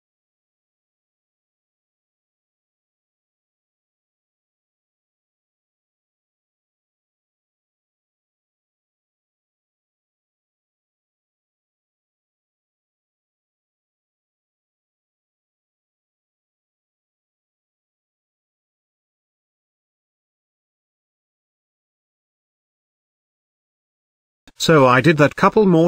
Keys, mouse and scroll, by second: 1.6-2.0 scroll up 1, 2.0 click, 2.5-3.5 scroll up 1, 3.5-3.8 scroll up 1, 3.8 z, 21.4 z.